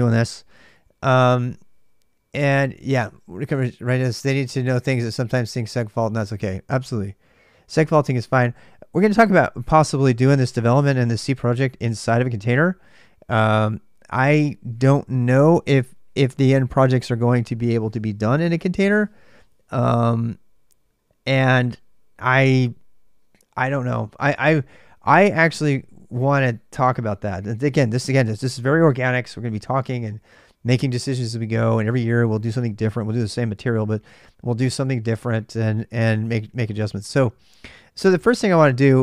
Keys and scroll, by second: 0.5 typing, 37.8-39.0 typing.